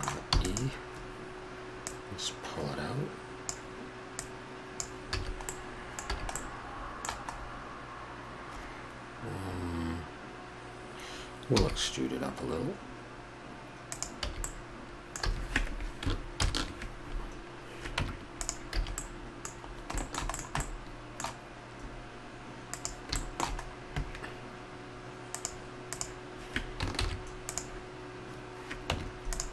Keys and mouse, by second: 0.3 e, 5.1 a, 5.7 middle click, 6.1 a, 11.5 e, 14.2 a, 15.2 a, 16.3 ctrl+n, 18.0 Tab, 18.8 a, 19.2-19.7 middle drag, 20.0 middle click, 20.8-22.3 middle drag, 22.7-23.2 drag, 23.2-25.3 middle drag, 25.3-27.0 drag, 27.0 shift+s, 28.9 Tab.